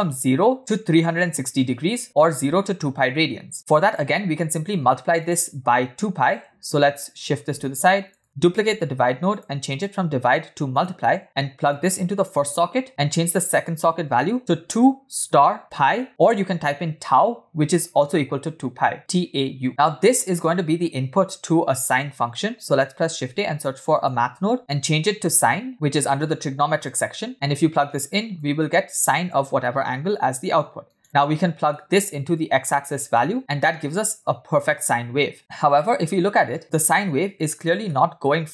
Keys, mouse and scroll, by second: 4.8-5.4 drag, 6.3 click, 7.2 click, 8.2 click, 8.6 shift+d, 9.7-10.9 drag, 11.7 click, 12.8 click, 13.3-16.1 drag, 20.2-21.7 drag, 23.1 shift+a, 24.6-27.1 drag, 27.6 click, 28.9 click, 31.0 click, 31.4 middle click, 32.4-33.3 drag, 35.8-36.6 middle drag, 36.6-37.0 scroll up 3, 37.9 middle click.